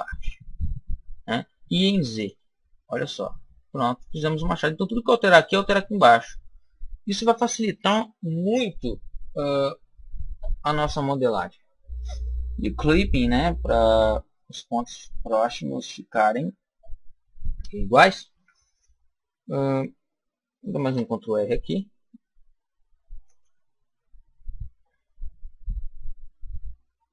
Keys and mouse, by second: 2.1 click, 2.9 middle click, 3.9 middle click, 12.8 click, 18.2 KP_1, 19.2-21.6 middle drag, 20.7 ctrl+r, 23.3 click.